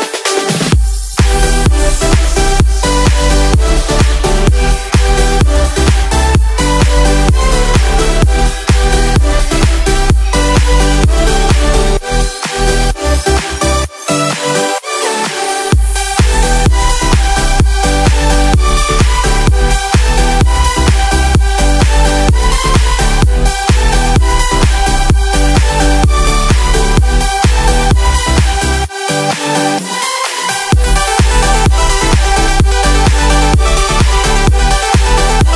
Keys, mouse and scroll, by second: 3.6 click, 5.1 click, 6.1 middle click, 6.7 middle click, 8.7 alt+z, 9.2-9.6 middle drag, 10.8 Tab, 11.6 middle drag, 13.6-15.7 middle drag, 15.9 KP_1, 17.6 click, 22.2-24.0 middle drag, 25.4 click, 27.1 click, 27.7 click, 28.9 click, 29.0-30.1 drag, 30.5 click, 33.3 click.